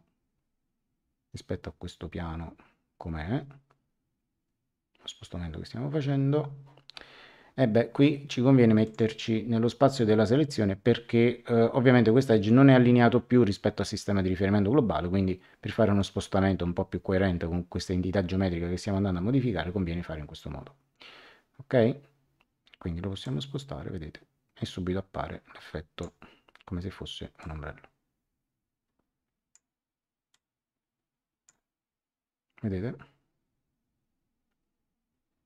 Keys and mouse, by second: 8.8 click, 23.2 click, 27.3 click, 28.8 click, 30.3 click.